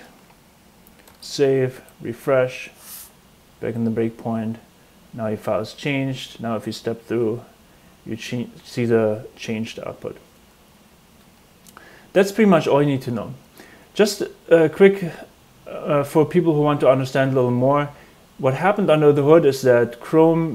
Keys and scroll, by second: 1.0 super+s, 1.7 super+r.